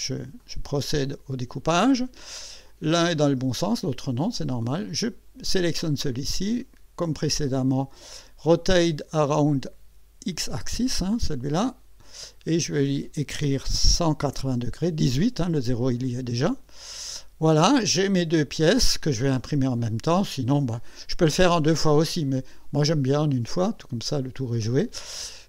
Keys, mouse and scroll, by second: 0.4 click, 2.6 click, 3.2-4.3 drag, 5.0 click, 6.6 right click, 11.6 click, 13.6 KP_1, 13.8 KP_8, 16.8 click.